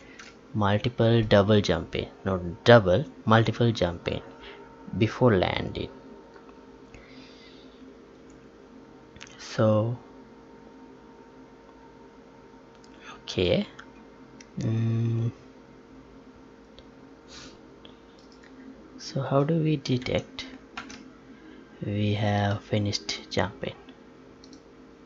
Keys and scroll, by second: 20.1 alt+Tab, 20.9 Tab.